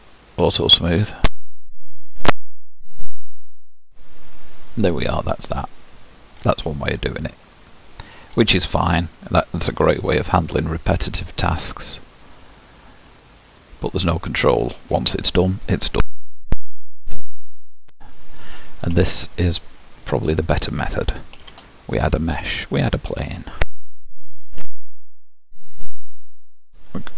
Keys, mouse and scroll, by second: 3.3-4.0 scroll up 1, 4.0-6.8 middle drag, 6.8-7.4 scroll down 1, 7.4-9.1 middle drag, 9.1-10.2 scroll up 1, 10.2-10.6 scroll up 1, 13.5 click, 14.5-15.2 scroll up 1, 15.2 middle click, 15.9-16.5 scroll down 1, 16.5 g, 18.4-19.0 scroll up 1, 19.0-22.9 shift+middle drag, 22.9 shift+a, 26.5 Tab.